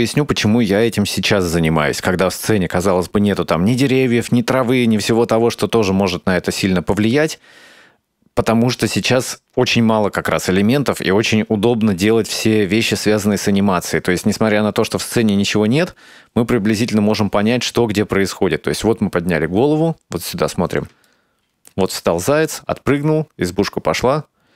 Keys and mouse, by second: 14.9 space, 21.1-21.9 shift+middle drag.